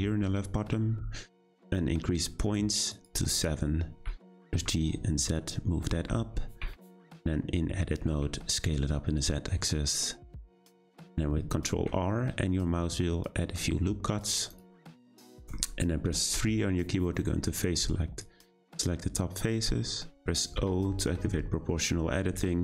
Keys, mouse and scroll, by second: 4.0 g, 5.9 Tab, 6.6 a, 6.7 s, 11.7 r, 15.1 shift+middle click, 16.0-16.4 scroll up 1, 16.4 3, 18.2 click, 20.6 o.